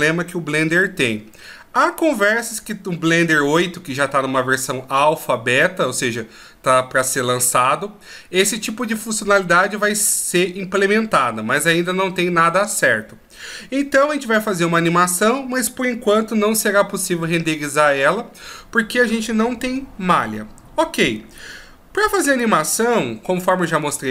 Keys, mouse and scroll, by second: 22.4 click.